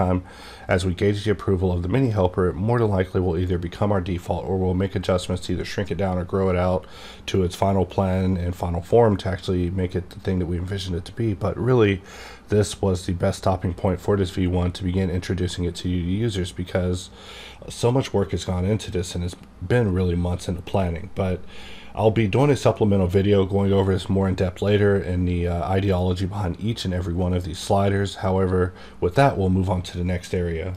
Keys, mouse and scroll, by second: 2.1-5.2 drag, 2.4 d.